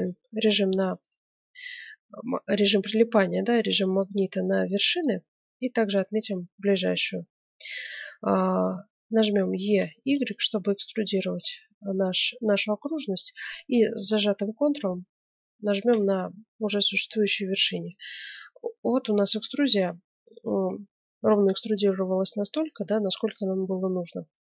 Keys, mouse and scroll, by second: 1.0-2.7 drag, 3.3-5.3 drag, 9.6 e, 16.0-17.7 middle drag, 18.0-20.8 middle drag, 21.3-23.2 middle drag, 23.5-23.9 scroll down 1, 23.9-24.4 middle drag.